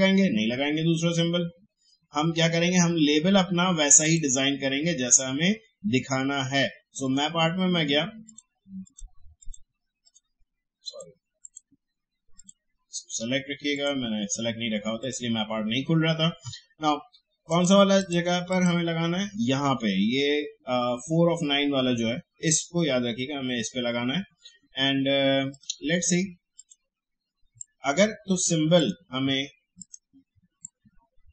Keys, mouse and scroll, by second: 4.0 click, 7.0 click, 25.5-31.3 drag.